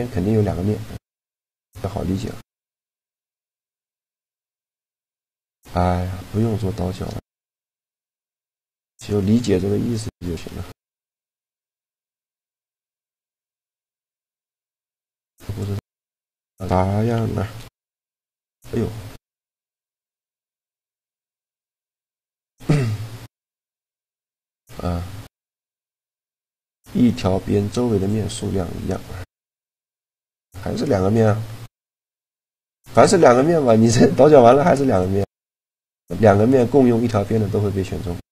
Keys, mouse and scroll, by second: 4.7-5.7 middle drag, 6.5 a, 9.7 middle click, 10.4 z, 11.3 b, 11.4 click, 13.3 middle click, 13.7 b, 16.0 z, 17.3 ctrl+b, 20.9 a, 21.3-23.4 middle drag, 23.4 right click, 23.9 shift+g, 24.3 click, 29.3-31.6 middle drag, 32.6 a, 33.3-35.0 right drag, 34.1 shift+g.